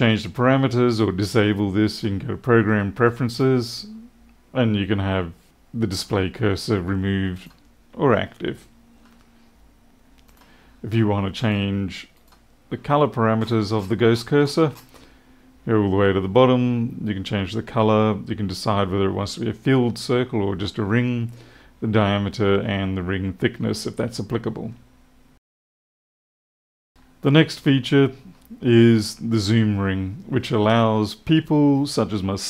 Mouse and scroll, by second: 1.8 click, 3.2 click, 7.3 click, 10.2 click, 11.3 click, 12.1 click, 13.3-14.8 scroll down 8, 26.9 middle click, 27.1 click.